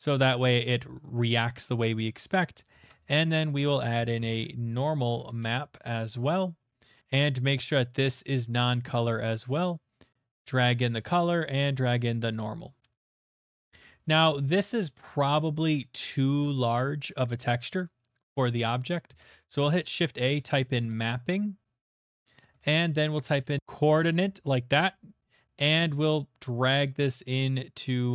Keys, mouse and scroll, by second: 0.5 click, 1.3 click, 1.6 middle click, 2.3 click, 2.7 click, 2.8 a, 3.5 click, 4.4-5.1 typing, 5.4 Return, 6.4 click, 6.8 middle click, 6.8 typing, 7.8 click, 8.6 click, 10.3 click, 11.8 click, 12.9 middle click, 13.0 middle click, 13.3 shift+middle click, 13.4 shift+middle click, 13.6 middle click, 13.7 middle click, 13.7 middle click, 13.7 middle click, 14.0 shift+middle click, 14.2 shift+middle click, 14.5 middle click, 15.9 shift+middle click, 18.2 middle click, 18.3 middle click, 18.5 middle click, 18.8 middle click, 19.1 a, 19.6 click, 20.2-20.5 typing, 20.8 Return, 21.8 click, 22.4 click, 22.6-24.1 typing, 22.7 click, 25.1 click.